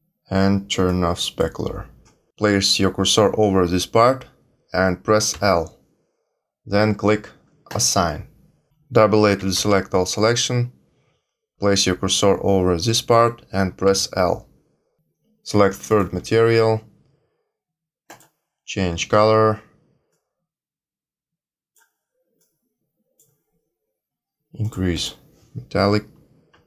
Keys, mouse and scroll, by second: 0.8 click, 5.3 l, 7.6 click, 9.3-9.7 a, 13.8 l, 14.9 l, 15.9 click, 18.0 click, 24.6 click.